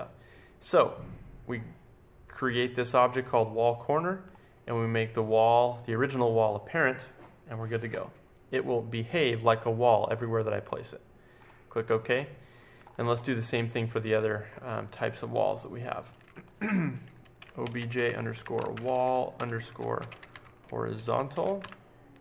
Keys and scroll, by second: 17.1-22.0 typing.